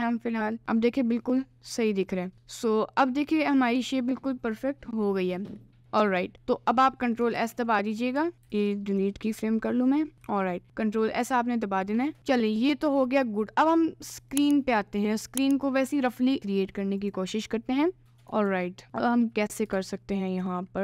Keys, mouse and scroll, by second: 0.6 middle click, 1.4 middle click, 2.3 Tab, 2.5 middle click, 3.4 middle click, 4.0 middle click, 5.6 middle click, 6.9 middle click, 7.4 ctrl+s, 8.2 a, 8.3 x, 9.6 middle click, 10.2 KP_Decimal, 10.5 middle click, 12.4 middle click, 14.4 click, 16.4 Tab, 17.1 click, 18.5 ctrl+r.